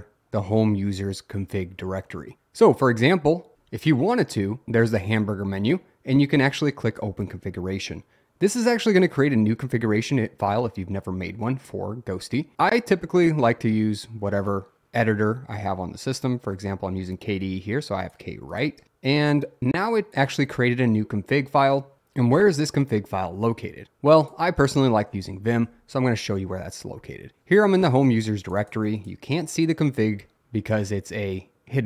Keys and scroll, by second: 25.4-26.2 typing.